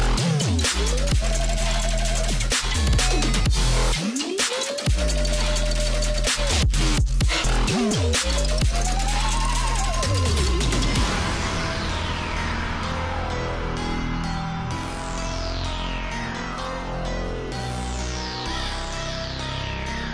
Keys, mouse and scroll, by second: 0.7 i, 4.1 click, 5.2 click, 5.4 alt+scroll up 1, 5.9 alt+scroll up 1, 6.1 space, 6.2 click, 6.3 space, 7.0 click, 9.5 space, 13.2 click, 13.7-14.0 alt+scroll down 1, 15.5 alt+Num_Lock, 15.5 alt+scroll down 1, 15.5-15.9 alt+scroll up 1, 16.3-16.6 scroll down 1, 17.2-18.7 drag, 18.7 ctrl+g, 19.4-20.1 alt+drag.